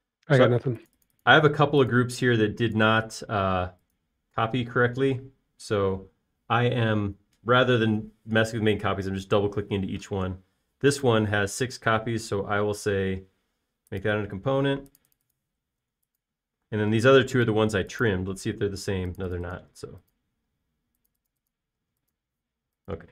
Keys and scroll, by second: 0.9-4.1 typing, 17.5 b, 18.1 space, 20.7-21.9 typing.